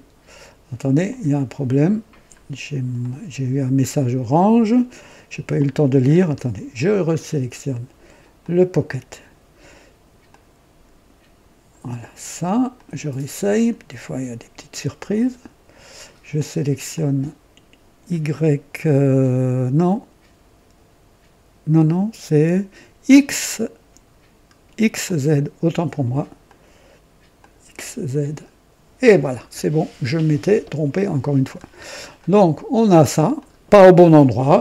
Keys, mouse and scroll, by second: 1.0 click, 2.3-2.6 scroll down 1, 2.9 right click, 5.5 click, 6.1 scroll up 1, 7.0 click, 8.3 click, 10.2-11.9 drag, 12.7 click, 15.0 click, 16.8 click, 25.0-25.8 drag, 26.4 click, 27.3 click, 28.3 click, 29.5-31.7 drag, 31.8 scroll down 1, 32.1 right click, 33.3 click.